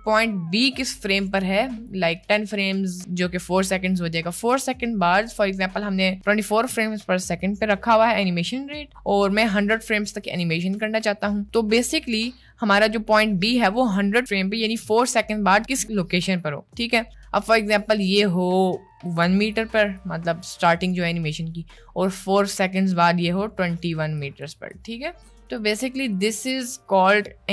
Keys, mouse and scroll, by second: 0.7-2.0 drag, 18.6 click, 19.2 click, 20.0-21.0 drag, 23.2 click, 24.2 click, 24.8 click, 25.6-26.7 ctrl+drag, 27.3 ctrl+click.